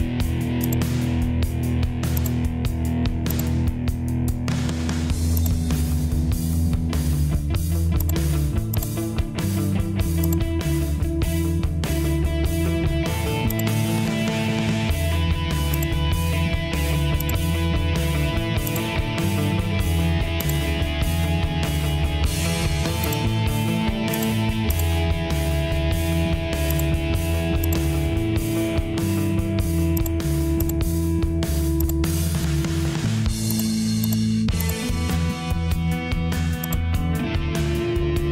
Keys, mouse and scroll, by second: 6.9 Delete, 19.3 Escape, 35.6 Return.